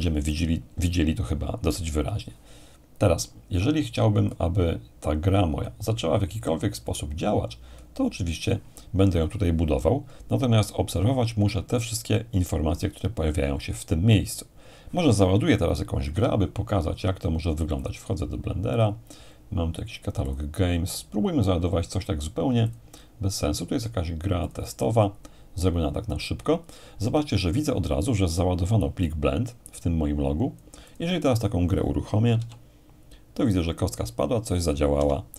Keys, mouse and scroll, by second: 4.3-6.6 drag, 6.9-9.3 drag, 16.1 F1, 17.8-19.8 drag, 20.3-21.3 drag, 22.7-23.7 drag, 24.4-25.6 drag, 29.0-31.9 drag, 32.3 p, 35.0 Escape.